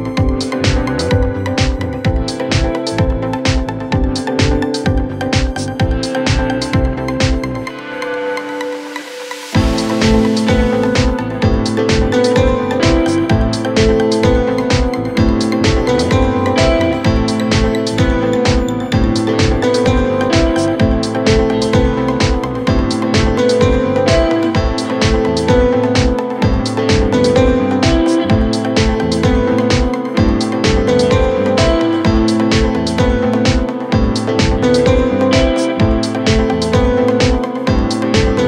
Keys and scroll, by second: 0.5 Delete, 1.2 Delete, 2.0 ], 2.6 ,, 3.5 ,, 7.6 ., 8.1 ,, 11.8 4, 22.3 4, 22.7 3, 24.0 4, 27.3 ctrl+F1, 34.3 3, 34.9 ctrl+z, 36.2 ].